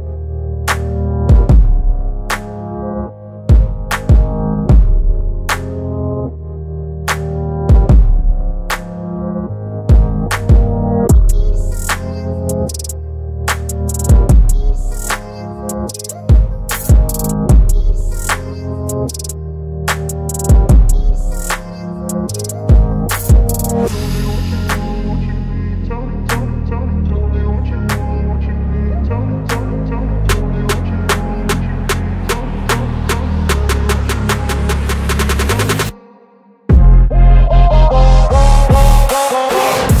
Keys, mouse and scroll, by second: 0.9 ctrl+v, 2.4 space, 2.8 -, 3.6 space, 4.8 ctrl+v, 7.2 ctrl+v, 7.2 ctrl+a, 8.5 ctrl+c, 9.2 Right, 10.4 space, 11.4 ctrl+v, 15.2 click, 17.0 BackSpace, 18.4 -, 18.5 space, 21.5 click, 22.7 space, 23.5 -, 25.2 space, 26.8 shift+i, 28.0 shift+l, 32.0 shift+i, 32.7 shift+o, 34.9 space, 35.6 -, 36.0 space, 37.2 ctrl+a, 39.1 click, 39.5-40.0 scroll down 1.